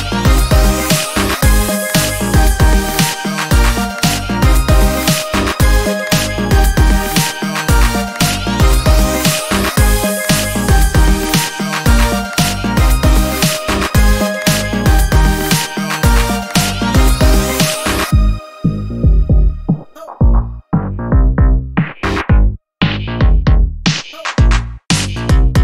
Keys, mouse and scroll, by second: 0.5 space, 1.3 ctrl+middle click, 2.0-2.5 ctrl+scroll down 4, 3.1 ctrl+space, 5.3 d, 6.2-8.1 drag, 10.6 ctrl+scroll up 2, 11.1-13.2 ctrl+drag, 13.7-14.6 ctrl+scroll down 4, 15.2 ctrl+d, 16.1-17.8 ctrl+drag, 18.0-18.4 ctrl+scroll up 2, 18.4 ctrl+space, 18.9-24.7 ctrl+drag.